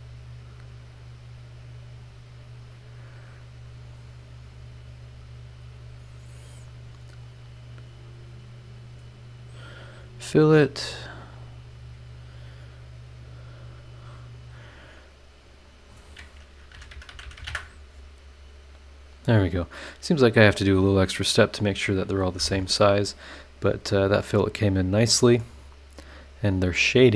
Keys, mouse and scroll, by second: 0.9 click, 2.0 click, 3.8 click, 7.2 click, 8.4 click, 8.8 click, 9.8 click, 11.5 click, 14.2 click, 15.7 click, 16.7-17.4 typing, 17.5 KP_Enter, 23.2 scroll down 2, 23.9 scroll up 2, 25.0 click, 25.4 click, 25.5-27.1 middle drag, 26.5-27.1 drag.